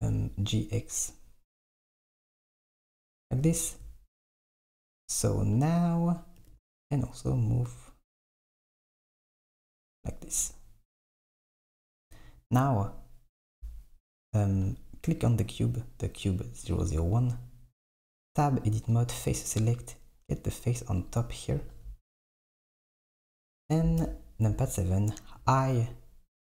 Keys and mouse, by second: 0.0 g, 6.5 g, 11.5 s, 13.6 Tab, 14.3 click, 15.3 click, 16.8 click, 18.0 Tab, 21.1 click, 24.1 KP_7, 25.5 i.